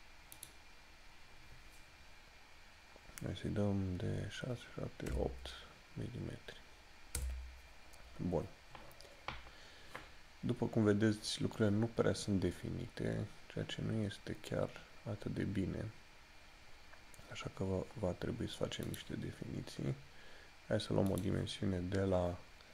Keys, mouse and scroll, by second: 0.5 click, 12.9 scroll down 1, 16.4 scroll up 1, 19.0 click.